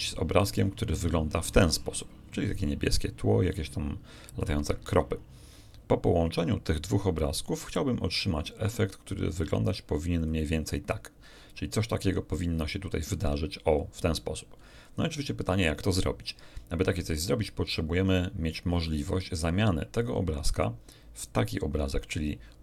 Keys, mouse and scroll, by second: 0.7 shift+click, 8.6 click, 9.6 click, 10.1 click, 13.1 click, 19.9 shift+click, 21.1 shift+click.